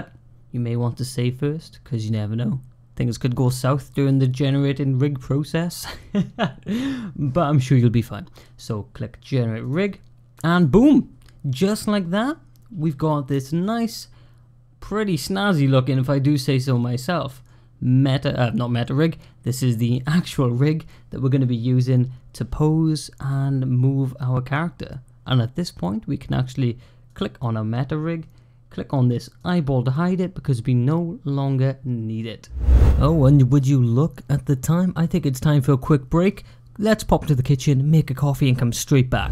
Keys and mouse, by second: 9.5 click, 10.5 click, 13.4-17.3 middle drag, 18.3-18.7 middle drag, 19.3 middle click, 20.7-25.2 middle drag, 26.9 click, 29.2 click, 29.8-32.4 middle drag.